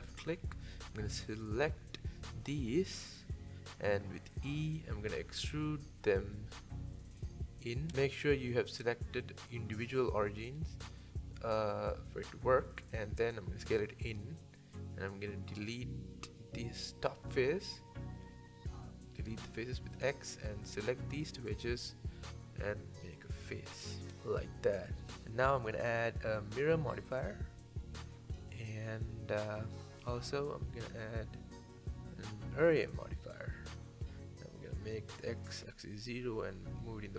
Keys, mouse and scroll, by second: 0.2 middle click, 0.9 alt+shift+click, 1.4 alt+shift+click, 1.8 scroll down 1, 2.1 middle click, 3.0-4.0 scroll up 1, 4.0 e, 4.7 s, 6.2-8.2 drag, 9.2 s, 13.4 shift+middle click, 13.6 scroll up 1, 13.9 shift+middle click, 14.4 scroll up 2, 14.7 middle click, 15.2 3, 15.5 click, 15.7-17.0 shift+middle drag, 17.0 ctrl+KP_Add, 17.4 shift+middle click, 17.9 x, 19.4 middle click, 20.0 2, 20.4 click, 20.9 shift+click, 21.8 f, 22.1 middle click, 22.9 scroll down 1, 23.2 middle click, 24.0 scroll down 3, 24.3 Tab, 24.5-25.0 middle drag, 25.0-25.4 scroll down 3, 25.4-26.2 middle drag, 26.2-27.6 drag, 27.6-28.5 middle drag, 28.5 scroll up 2, 28.8-30.9 middle drag, 31.7 middle click, 32.1-33.3 drag, 33.3 shift+middle click, 34.2-37.0 drag, 37.0-37.1 middle drag.